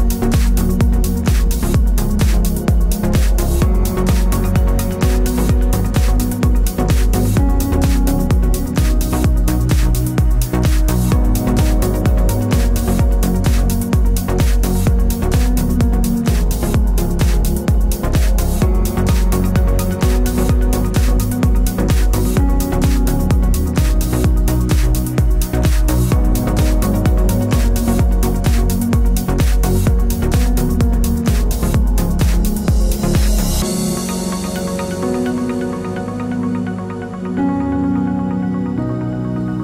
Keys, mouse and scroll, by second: 0.0-1.8 drag, 5.9 ctrl+a, 10.6 Tab, 10.7 `, 10.7 Tab, 11.5-27.4 middle drag, 15.3 scroll down 1, 19.4 scroll up 1, 20.7 KP_1, 26.1 Tab, 27.4 click, 30.4 shift+d, 37.1 ctrl+KP_Add.